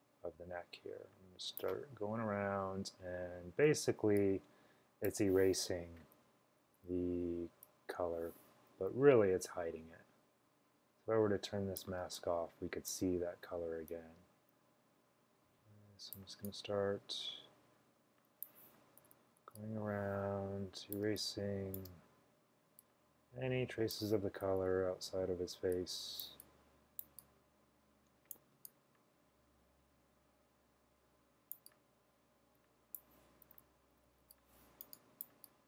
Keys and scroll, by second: 6.2-7.2 typing, 12.1-13.0 typing, 19.1-19.5 typing, 21.1-22.2 typing, 24.4-25.8 typing, 33.5-34.3 typing.